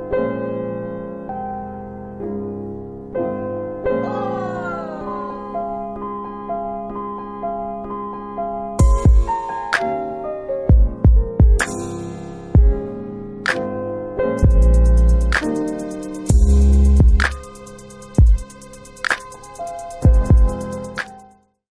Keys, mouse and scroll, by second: 15.2 scroll up 1, 16.3 click, 16.8 scroll down 1, 17.8 click, 18.0 scroll up 1, 19.4 scroll down 1.